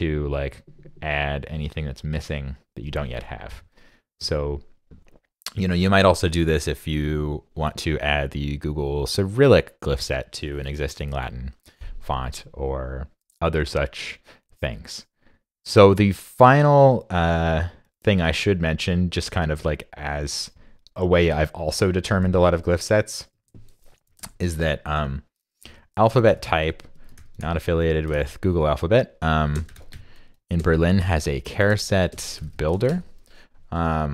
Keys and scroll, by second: 22.3 super+Tab, 23.3 super+Tab, 23.8 super+Tab, 24.3 super+t.